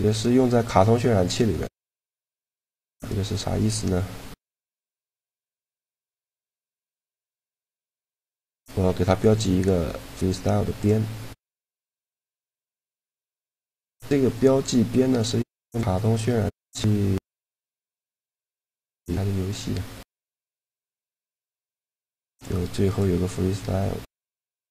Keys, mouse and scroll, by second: 0.0-2.2 middle drag, 2.2 click, 3.1-9.2 right drag, 4.4 a, 8.4 ctrl+e, 11.7 Tab, 13.9 Tab, 15.2-17.2 drag, 17.3 middle click, 18.5-20.5 drag, 20.7-23.2 middle drag, 22.6-24.7 drag.